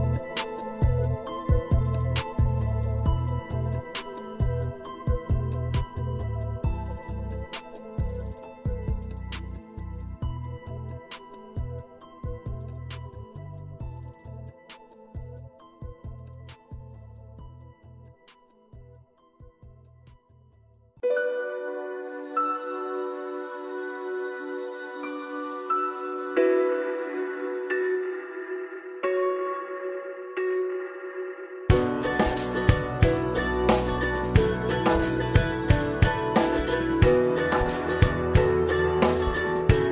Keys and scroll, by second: 35.4 typing.